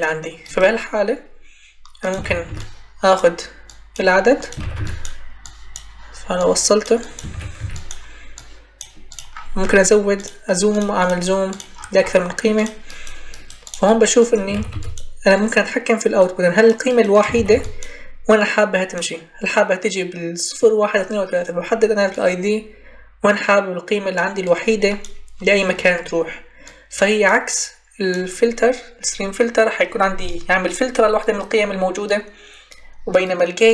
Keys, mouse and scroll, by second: 2.1 ctrl+c, 2.4 ctrl+v, 4.5 ctrl+c, 4.6 ctrl+v, 7.2 ctrl+c, 7.5 ctrl+v, 14.5 ctrl+c, 14.6 ctrl+v, 17.2 ctrl+c, 17.4 ctrl+v.